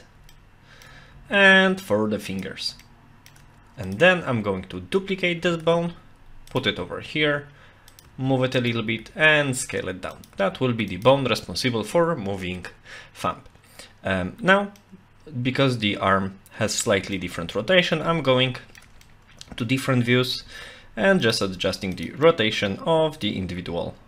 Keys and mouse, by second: 0.3 shift+middle click, 2.3 click, 2.8 shift+middle click, 3.9 click, 5.5 shift+d, 6.5 click, 6.8 r, 8.0 g, 9.0 s, 10.3 g, 14.8-16.7 middle drag, 17.1 middle click, 18.3 shift+middle click, 19.0 middle click, 20.3 r, 21.3 g, 22.3 middle click, 23.2 click, 23.6 g.